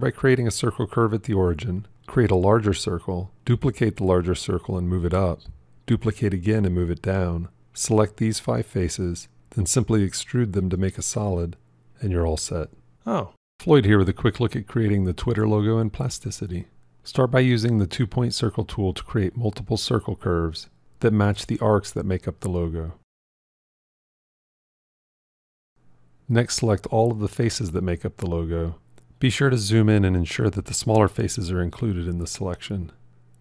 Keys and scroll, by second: 3.7 shift+d.